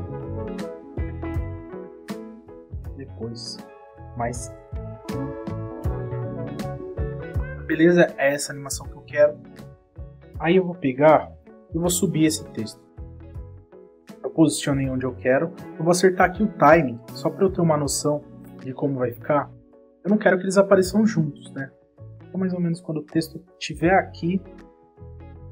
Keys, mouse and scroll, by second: 0.2 click, 0.8 click, 3.9 click, 4.9 click, 5.3 space, 6.9 click, 7.3 space, 8.7 space, 13.7 click, 14.2 click, 15.3 click, 15.6 space, 17.1 click, 17.5 space, 19.4 click, 19.9 space, 21.9 click.